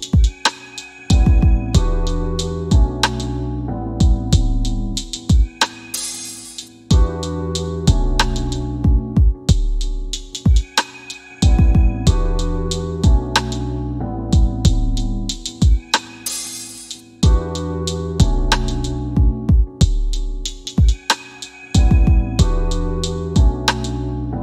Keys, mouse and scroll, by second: 1.3-1.9 scroll down 1, 1.9 scroll up 1, 5.7 scroll down 1, 8.5 click, 13.1 click, 18.0 click, 20.4 click.